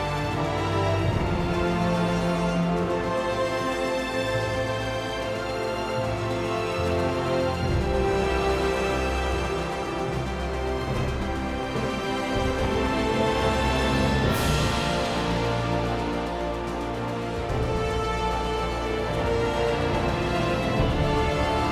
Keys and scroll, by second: 3.3 r, 7.6 r, 13.9-14.7 typing, 20.9 r.